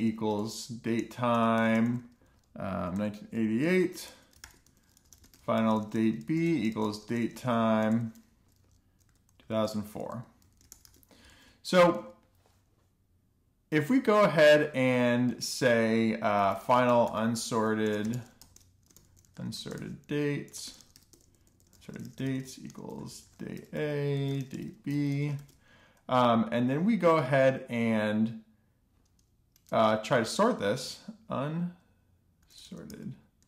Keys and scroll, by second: 0.0-12.2 typing, 12.5 super+s, 13.1 Return, 16.5 Return, 17.4-26.7 typing, 27.8 Return, 30.7-33.4 typing.